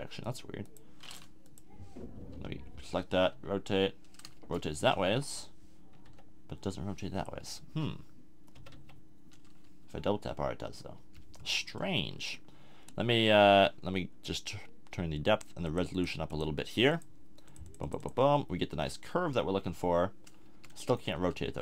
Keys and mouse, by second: 2.3 l, 3.3 r, 5.0 KP_1, 6.0 r, 8.5 r, 19.7 r, 21.1 Tab.